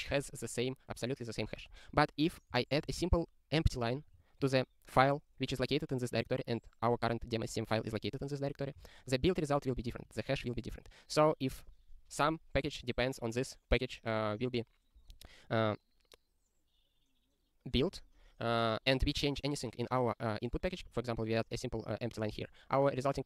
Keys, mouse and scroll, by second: 1.8 ctrl+n, 2.2 ctrl+n, 2.5 Return, 2.9 ctrl+s, 4.0 ctrl+p, 4.1 ctrl+p, 4.4 ctrl+e, 5.1 ctrl+b, 8.9 ctrl+e, 11.6 click, 20.9 click, 22.2 ctrl+k, 22.4 ctrl+s.